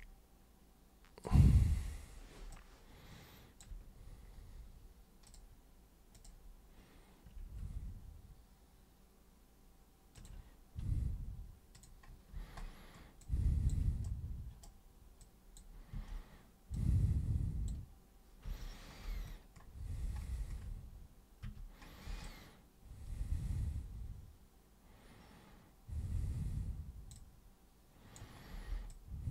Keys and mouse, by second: 0.0-1.3 alt+super+drag, 2.6-3.6 alt+super+drag, 5.3 super+click, 6.1 click, 10.2 ctrl+click, 11.7 click, 13.2 alt+super+click, 14.1 super+right click, 15.2 super+click, 15.9 super+w, 16.8 super+click, 18.4 super+3, 21.5 super+1, 22.2-27.1 alt+super+drag, 27.7 alt+super+click, 28.9 super+click.